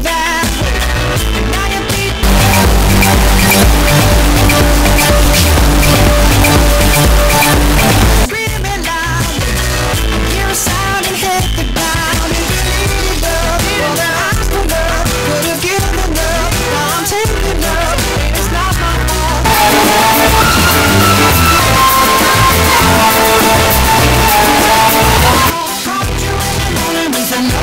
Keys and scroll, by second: 8.9 Page_Down, 25.7 Page_Down.